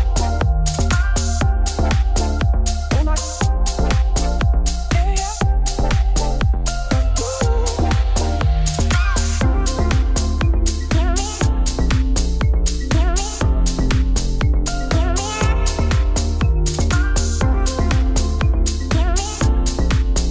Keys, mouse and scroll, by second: 0.4 click, 0.6 middle click, 1.3 scroll up 3, 1.9 click, 2.7 scroll down 3, 3.8-4.7 scroll up 1, 5.9 scroll down 1, 6.1 shift+middle click, 6.7 click, 6.9 click, 7.0 middle click, 7.7 shift+s, 7.8 Tab, 8.0 Tab, 8.4 x, 8.6 middle click, 8.7 shift+a, 10.1 click, 10.4 Tab, 10.6 i, 11.6 r, 12.2 middle click, 12.5 s, 13.6 middle click, 13.7 e, 16.2 shift+middle click, 16.4-17.1 scroll up 4, 16.6 middle click, 17.1 s, 17.7 middle click, 18.5 e.